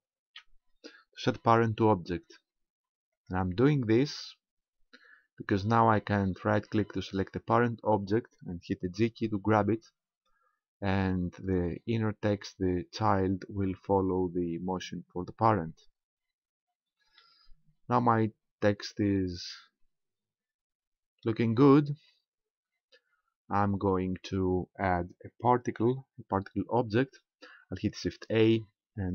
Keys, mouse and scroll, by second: 0.2 ctrl+p, 4.2-5.9 scroll down 2, 6.8 right click, 9.1 g, 11.5 right click, 16.1-17.2 scroll down 2, 17.2 middle click, 21.3-22.8 scroll down 1, 28.2 shift+a.